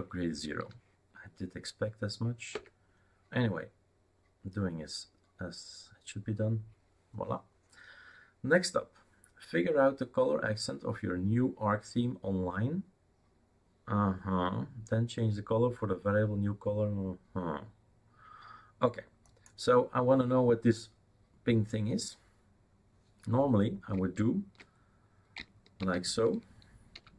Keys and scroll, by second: 0.7 y, 2.6 Return, 25.8 shift+super+d, 26.7-27.1 typing.